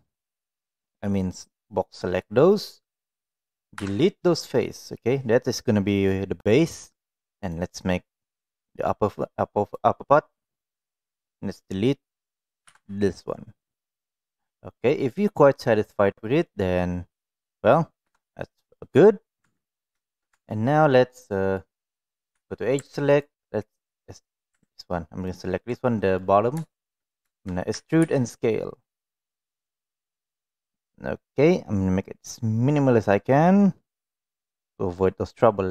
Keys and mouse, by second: 0.8-2.2 drag, 7.4-9.7 drag, 12.6 Delete, 14.5-16.4 middle drag, 17.1 middle click, 18.0 KP_1, 19.4 Tab, 20.0 shift+middle click, 20.2 Tab, 20.5 middle click, 21.2 middle click, 22.3 2, 25.2 alt+click, 25.7 middle click, 26.7 shift+middle click, 27.7 e, 34.0 click.